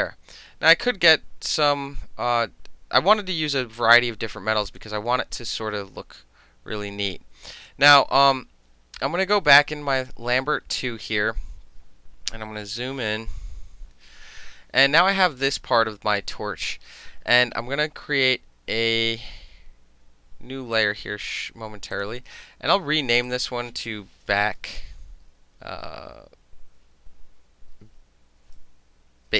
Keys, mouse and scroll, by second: 0.6-1.6 drag, 4.7 click, 4.8 middle click, 5.6-7.7 drag, 7.7 middle click, 10.0 click, 13.6 ctrl+=, 13.9 ctrl+=, 20.8 click, 22.0 click, 23.3 click, 23.5 click, 24.4-25.6 typing.